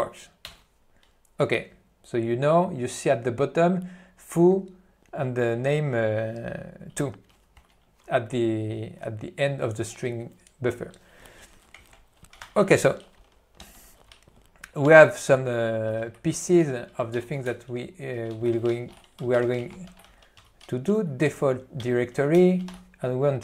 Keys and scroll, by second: 0.6 Return, 11.8 alt+o, 12.6 ctrl+e, 14.9 Return, 16.1 ctrl+n, 16.8 ., 17.5 ., 22.0 Return, 22.5 ..